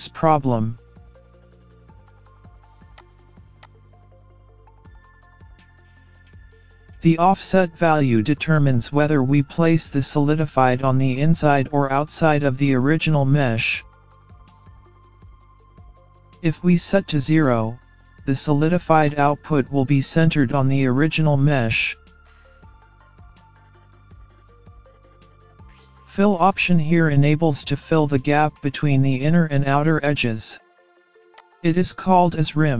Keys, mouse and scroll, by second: 3.0 click, 3.7 click, 9.1 click, 19.1 click, 31.5 click.